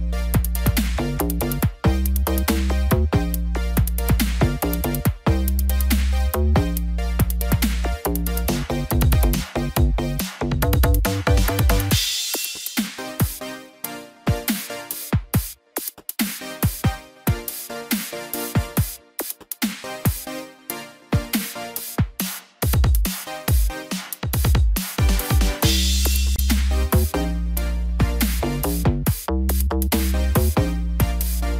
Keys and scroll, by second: 4.2 ctrl+z, 9.5 ctrl+z, 22.0 ctrl+-, 23.0 ctrl+0.